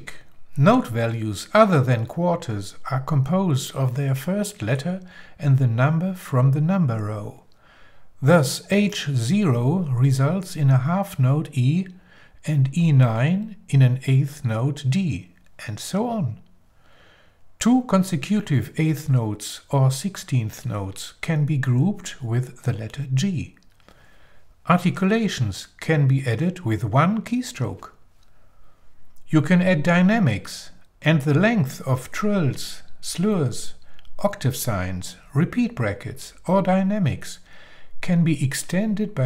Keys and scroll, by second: 11.2 h, 12.6 0, 13.8 e, 14.2 9, 18.3 e, 18.5 0, 19.8 g, 21.0 l, 23.1 BackSpace, 23.7 i, 29.0 shift+l, 31.6 shift+9, 33.2-34.5 typing, 35.9-38.6 typing.